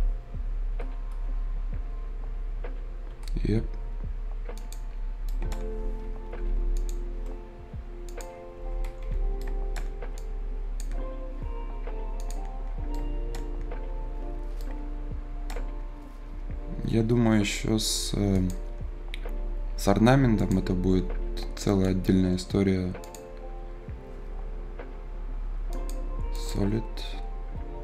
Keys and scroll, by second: 3.0 Return, 6.2 Escape, 8.5 Escape.